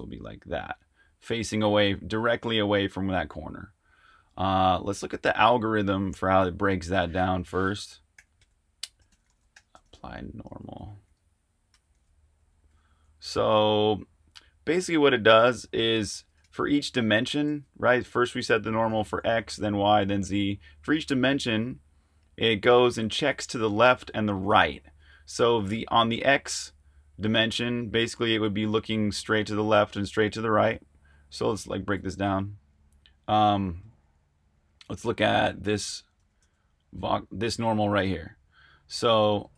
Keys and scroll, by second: 4.6 super+Tab, 8.1-10.0 typing, 11.9-25.4 typing, 29.2 super+Tab, 32.0 r, 34.0 g, 36.9 typing.